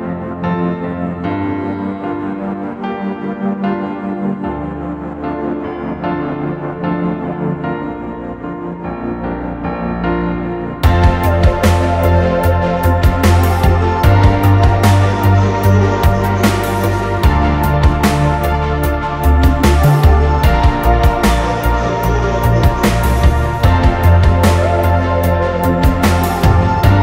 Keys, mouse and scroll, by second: 5.2 space, 7.3-8.5 scroll up 1, 8.6 right click, 12.1 space, 13.1 right click, 18.4 space, 18.6 right click, 20.8 right click, 22.1-22.9 scroll down 1, 23.7 scroll down 1, 24.1 middle click, 24.5 scroll up 1, 25.4 m.